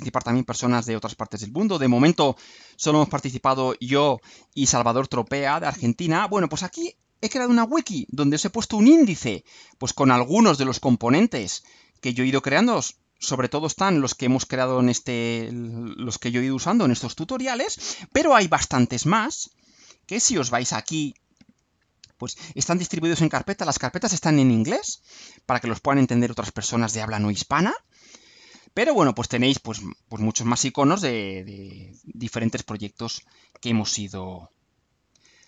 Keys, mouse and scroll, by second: 6.0 scroll down 2, 6.7-7.5 scroll up 4, 7.7 scroll down 2, 9.2-9.9 scroll down 2, 10.2 scroll down 2, 12.1-18.4 drag, 19.8 click, 21.6 scroll down 1, 25.1-25.5 scroll down 2, 29.0-29.3 scroll down 2, 29.9 scroll down 2, 30.5-31.9 scroll up 6, 33.7 click, 34.9-35.4 scroll down 3.